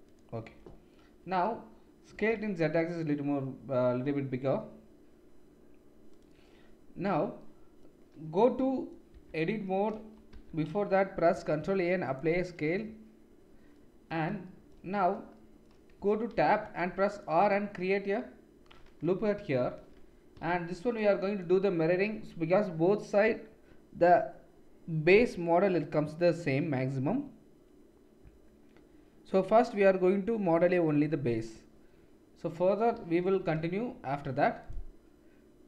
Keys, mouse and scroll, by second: 2.1 s, 9.1 Tab, 10.3 Tab, 11.3 ctrl+a, 16.0 Tab, 16.6 ctrl+r, 18.6-21.1 middle drag, 19.6 KP_7, 20.5 shift+z, 21.1-34.8 drag, 34.8 middle click.